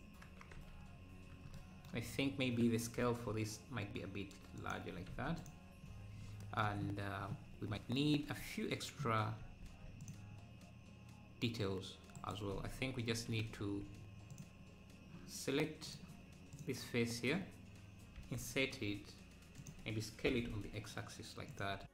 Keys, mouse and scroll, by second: 0.5 KP_Decimal, 0.7 KP_Decimal, 1.0-1.5 scroll down 3, 3.0 s, 5.4 ctrl+a, 7.5 scroll up 1, 8.2 Tab, 8.7 scroll up 1, 9.6 ctrl+r, 13.1 ctrl+z, 14.4 click, 15.9 click, 18.2 i, 20.3 s.